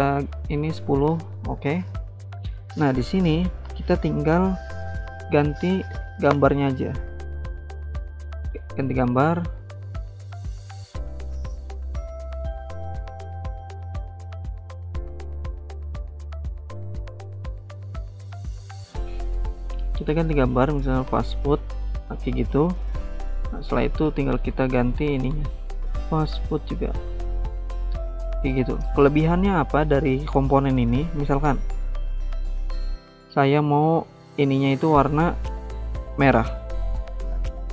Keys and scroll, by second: 24.2-27.4 typing.